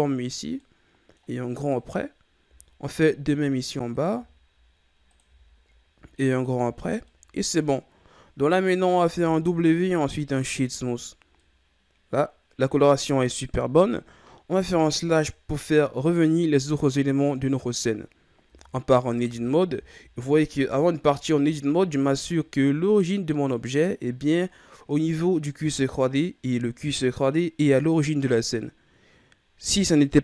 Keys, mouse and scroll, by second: 0.6 middle click, 1.5 right click, 2.4 i, 4.1 i, 5.4 i, 6.5 Tab, 6.8 scroll down 1, 7.0-9.0 middle drag, 9.0 w, 11.3-14.3 middle drag, 14.6 KP_Divide, 18.4 Tab, 19.2 a, 19.6 a, 20.7-22.8 shift+scroll up 6, 22.8-23.6 scroll up 1.